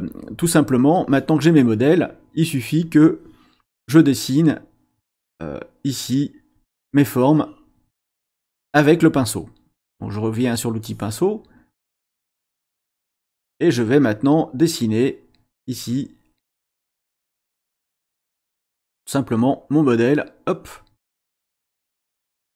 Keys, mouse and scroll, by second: 2.8 click, 7.0 click, 10.1 click, 11.9-13.6 drag, 15.7-17.2 drag, 18.6 click, 19.6 click, 20.5 click, 21.0 click, 21.7 click.